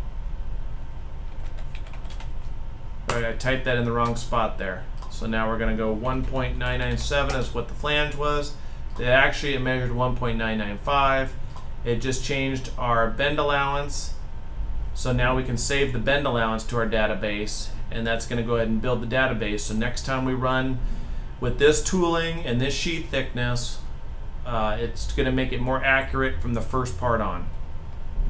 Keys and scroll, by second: 1.0-1.7 typing, 2.8 Left, 5.9-6.8 typing.